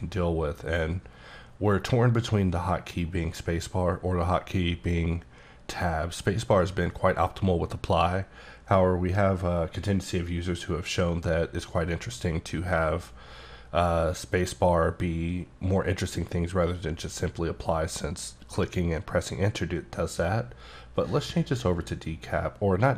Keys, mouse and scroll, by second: 21.1 click.